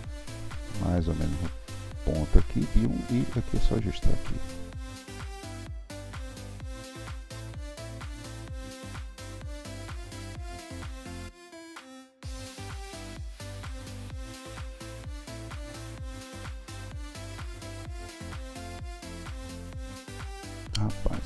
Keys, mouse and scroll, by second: 3.6 click, 4.8 click, 9.0 KP_3, 9.6-9.9 scroll up 4, 9.9-11.6 shift+middle drag, 12.1 s, 13.1-14.1 middle drag, 15.6 alt+z, 15.8-16.9 middle drag, 16.9 Tab, 17.2-18.1 middle drag, 18.1 Tab, 18.6 click, 19.9 alt+z, 20.2 Tab, 20.3-21.2 middle drag.